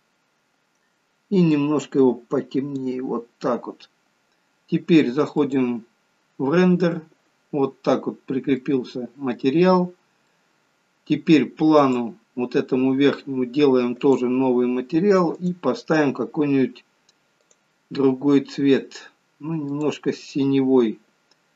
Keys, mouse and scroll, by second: 6.1 click, 7.7-8.3 scroll up 3, 8.3 scroll down 1, 8.5 scroll down 1, 8.6 middle click, 10.0-10.6 scroll down 2, 10.4 middle click, 11.8 click, 14.1 click, 15.5 click, 17.5 click.